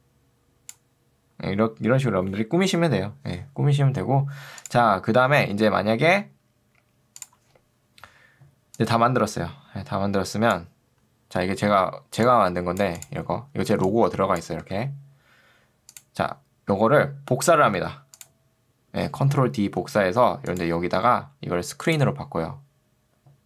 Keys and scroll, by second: 13.8 ctrl+2, 14.6 Escape, 19.8 ctrl+d.